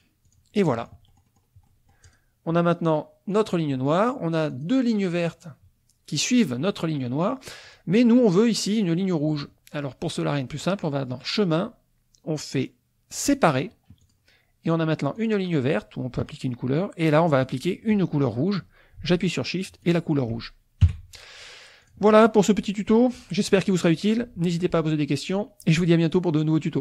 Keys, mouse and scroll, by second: 0.3 click, 1.5 middle click, 2.0 click, 3.3 click, 4.5 click, 7.6 click, 8.6 click, 10.6 click, 13.4 click, 14.0 click, 15.3 click, 17.3 click, 19.8 click, 20.8 KP_5, 21.8 click, 22.1 click, 22.4 middle click, 22.6-24.0 drag, 25.8 click.